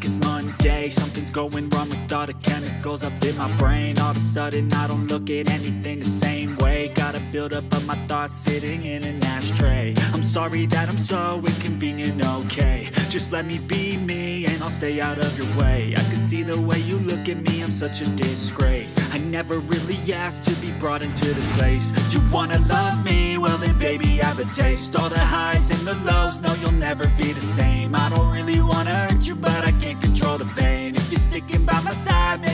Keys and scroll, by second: 5.1 ctrl+d, 16.2 ctrl+l, 20.2 g.